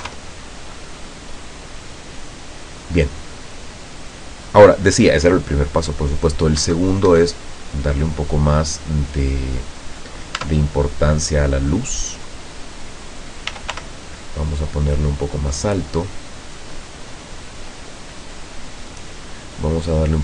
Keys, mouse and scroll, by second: 0.0 F12, 6.7 Escape, 7.6 middle click, 8.2 middle click, 8.4 scroll down 1, 9.1 middle click, 9.9 right click, 10.5 Tab, 10.7 right click, 11.5-12.8 drag, 13.6 r, 13.8 y, 15.7 click, 16.1-17.1 middle drag, 17.8 click, 19.9 click.